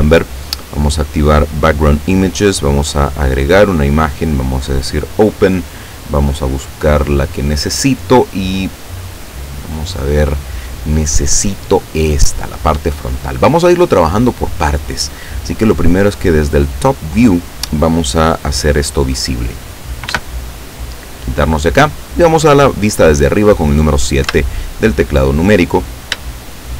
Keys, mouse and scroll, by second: 0.3 click, 1.0-1.3 scroll down 2, 1.9 click, 2.3-2.6 scroll down 2, 2.9 click, 3.4 scroll down 2, 4.5 click, 6.4 click, 7.3 click, 9.2 click, 12.3 click, 14.7-15.1 scroll down 1, 16.0 click, 17.2 click, 20.1 n, 24.3 KP_7, 26.3-26.7 shift+middle drag.